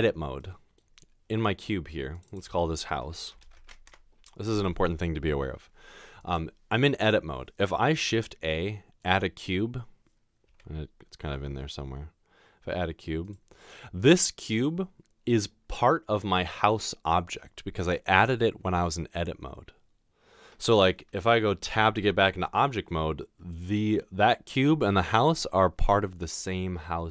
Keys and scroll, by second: 3.4 typing, 3.9 Return, 8.0 typing, 10.5 typing, 21.7 Tab.